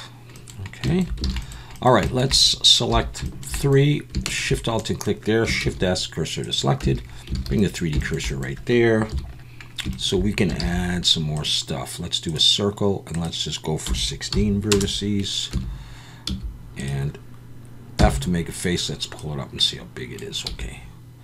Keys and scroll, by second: 1.2 alt+a, 2.9 3, 5.6 shift+s, 6.8 Tab, 7.4 alt+a, 9.1 KP_1, 10.6 shift+a, 15.5 Tab, 16.3 s, 18.0 f, 20.5 s.